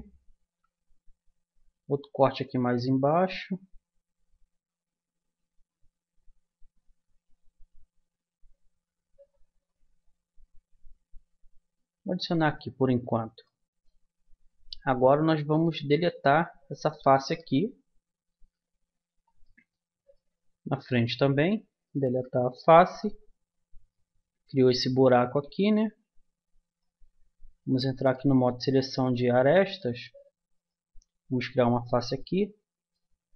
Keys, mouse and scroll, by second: 0.4 ctrl+r, 13.4-15.5 middle drag, 15.5-17.1 drag, 16.2 right click, 17.4 Delete, 19.4-21.6 middle drag, 21.6 click, 22.0 Delete, 26.6-28.0 drag, 28.0 middle click, 29.6 middle click, 30.5-32.2 drag, 31.7 f, 32.2 middle click.